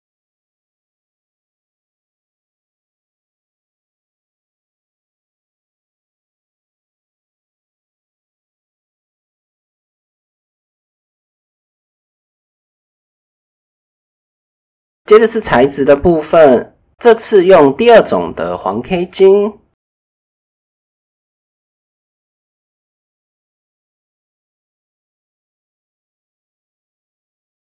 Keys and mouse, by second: 0.6 Tab, 1.5 click, 2.4 KP_1, 4.1 click, 4.3 middle click, 4.9 click, 5.3-6.3 middle drag, 6.3 click, 7.2 middle click, 8.1 click, 8.3 middle click, 8.5 Tab, 8.5-9.4 drag, 10.5-11.8 middle drag, 10.9 KP_7, 11.7 KP_1, 12.5 shift+middle drag, 13.5 click, 14.1-14.4 right drag, 19.2 click, 19.8 KP_0, 21.9-22.4 middle drag, 22.5 drag, 23.1 click, 23.5-25.8 middle drag, 26.5 middle click.